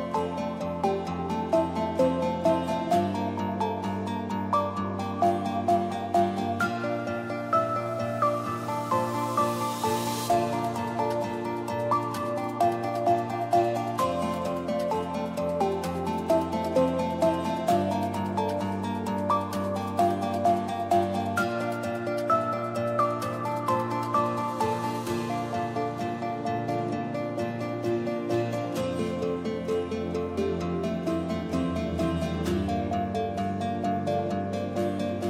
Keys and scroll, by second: 0.1 2, 0.3 Return, 4.7 Return, 4.9 ctrl+d, 6.8 space, 24.7 d, 29.8 space, 31.2-34.8 typing.